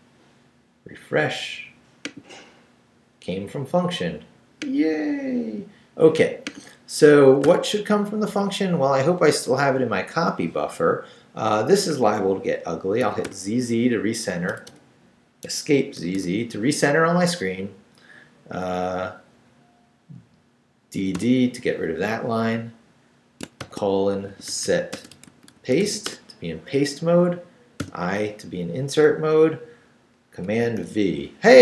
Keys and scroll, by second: 7.4 o, 8.3 Down, 13.0 z, 14.5 BackSpace, 15.4 Escape, 16.0 z, 19.3 Down, 20.9 d, 23.6-26.3 typing, 27.8 i, 30.5 super+v.